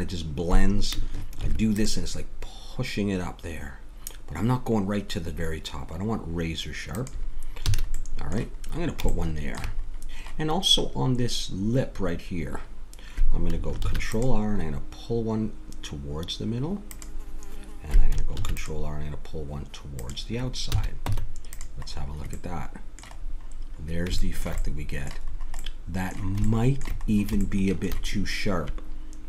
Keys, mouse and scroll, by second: 1.4 ctrl+r, 7.6 a, 8.0-9.2 middle drag, 13.8 ctrl+r, 18.3 ctrl+r, 20.7 a, 21.1 Tab, 21.9 middle click, 23.3 middle click, 26.8 middle click.